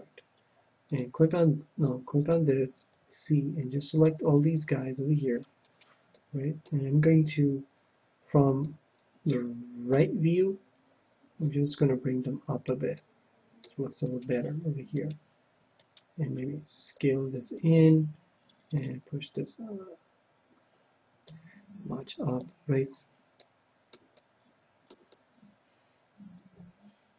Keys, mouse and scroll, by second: 0.9-4.0 drag, 2.9 c, 5.7-7.3 right drag, 6.1-7.7 middle drag, 8.6 KP_1, 9.9 KP_3, 11.4-13.1 drag, 12.9-14.5 middle drag, 14.0-17.6 right drag, 16.9 s, 17.8-20.4 drag, 22.4 a, 22.8-26.7 middle drag.